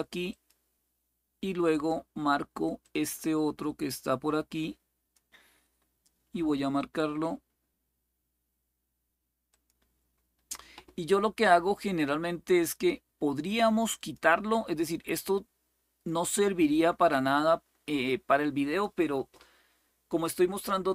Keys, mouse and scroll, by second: 0.0 click, 1.4 click, 2.6-4.9 drag, 6.5 click, 9.2 click, 11.5 click, 13.7 click, 15.0-18.6 drag.